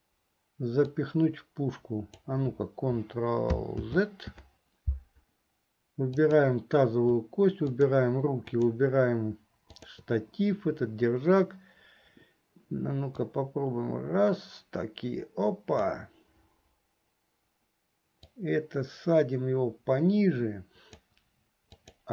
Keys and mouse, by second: 1.1-3.5 drag, 4.0 ctrl+z, 6.2 click, 7.8 shift+click, 8.6 shift+click, 9.9 shift+click, 13.4-16.3 drag, 18.7-21.4 drag, 21.9-22.1 drag.